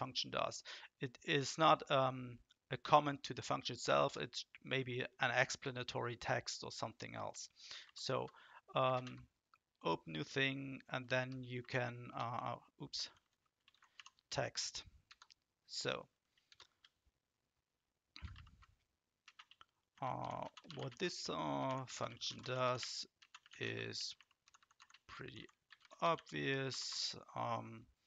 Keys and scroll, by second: 7.8 ctrl+shift+?, 8.9 ctrl+space, 11.2 t, 13.0-14.4 typing, 15.0 Return, 16.5 shift+Return, 18.3 ctrl+shift+?, 19.2-26.8 typing.